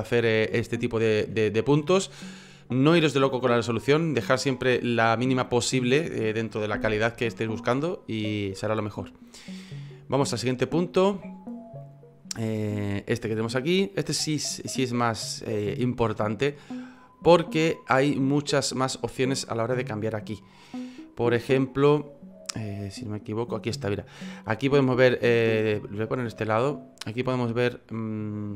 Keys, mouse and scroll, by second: 1.3 F9.